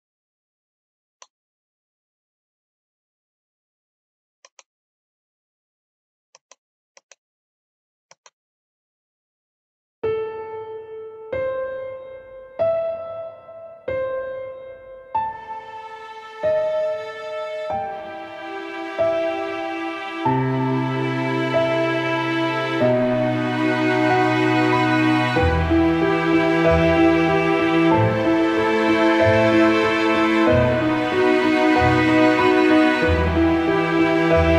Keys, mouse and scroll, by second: 4.6 click, 10.8-15.4 drag, 15.8 Up, 16.2 scroll up 1, 16.5-18.9 drag, 18.9 scroll down 1, 21.4 click, 23.7 click, 24.8 ctrl+click, 25.5 ctrl+click, 27.1 click, 32.2 ctrl+a, 32.8 ctrl+c, 33.6 click.